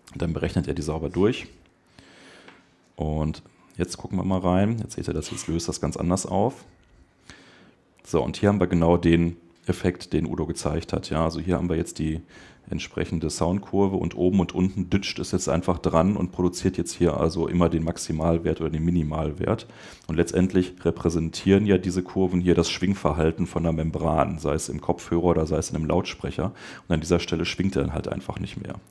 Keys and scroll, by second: 1.8 Escape.